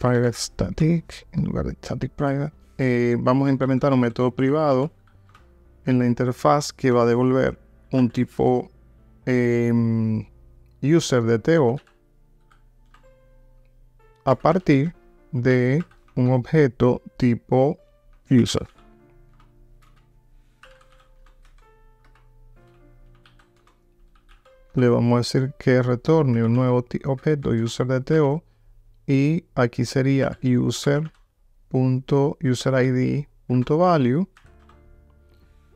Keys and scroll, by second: 0.8 Return.